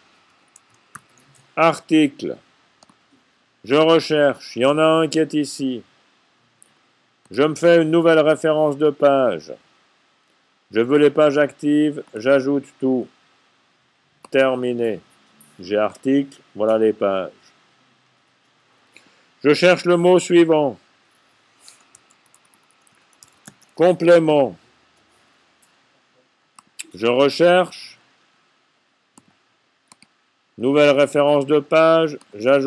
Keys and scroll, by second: 0.0-0.8 typing, 21.9-24.2 typing.